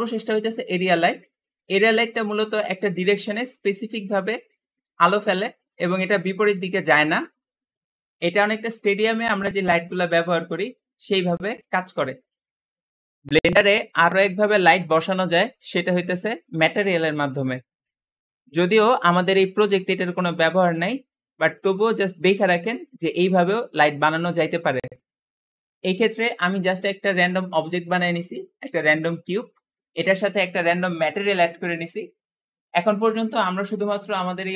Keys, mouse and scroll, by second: 0.2 click, 1.1-1.5 scroll down 2, 1.9 scroll up 1, 2.3 g, 3.2 r, 5.0 r.